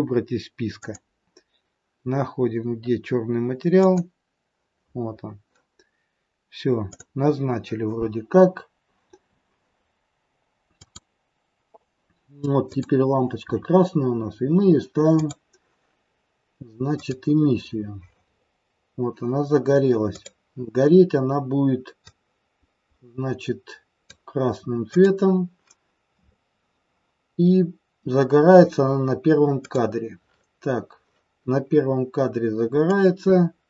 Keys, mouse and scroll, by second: 0.7 click, 6.9 click, 10.7 click, 12.6 click, 14.0-15.0 scroll up 1, 15.0 click, 18.3-20.2 scroll up 1, 20.2 click, 20.2-21.5 scroll up 4, 29.6 click, 32.9 click.